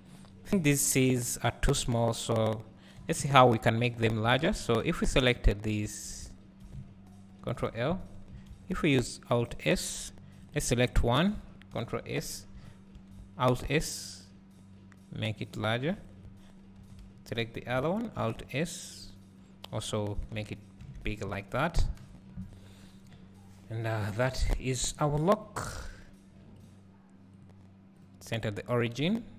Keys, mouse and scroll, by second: 4.3 Tab, 5.4 click, 6.3 shift+click, 7.5-11.0 drag, 16.1 click, 20.6 scroll down 1, 20.9 alt+a, 21.9 KP_1, 23.7-24.1 scroll down 4, 25.1 click.